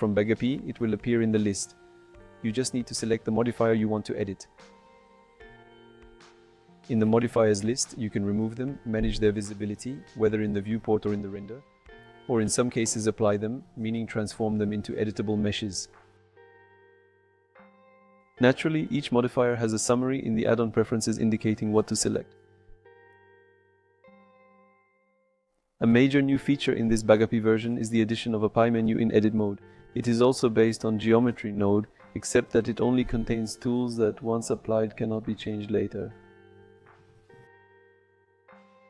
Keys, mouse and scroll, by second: 1.9 click, 2.5-4.5 drag, 5.3-7.4 drag, 8.4 click, 10.1-11.4 shift+drag, 14.8 click, 15.8 click, 16.7 click, 17.8 click, 25.5 click, 26.0 a, 26.5 x, 28.2 shift+s, 28.2 shift+a, 30.4 KP_Decimal, 31.7-32.2 middle drag, 36.7 click, 37.5 Tab.